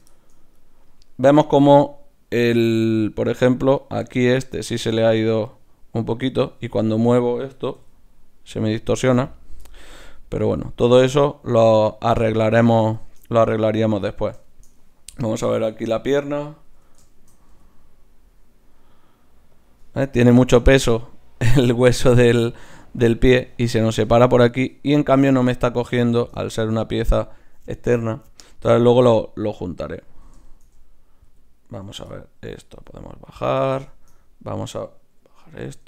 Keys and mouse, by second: 1.4 r, 3.9-9.3 drag, 7.8 r, 10.2-11.9 drag, 10.5 r, 12.7 right click, 13.0-14.4 drag, 14.4 right click, 15.3 click, 16.1-17.1 right drag, 16.8 KP_3, 17.1-19.1 drag, 17.5 g, 26.5-29.2 right drag, 29.7 right click, 30.5 click, 31.3 g, 32.8 g, 34.5-35.8 drag, 35.6 alt+g.